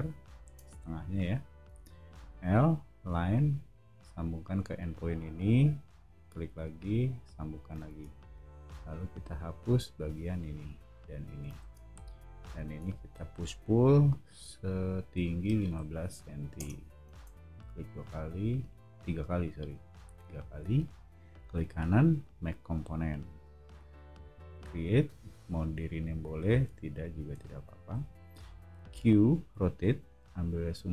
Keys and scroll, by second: 0.4 space, 1.7 l, 7.9 space, 8.6 e, 11.6 space, 12.7 p, 15.1 1, 15.6 5, 16.5 Return, 17.1 space, 26.0 o, 28.3 q.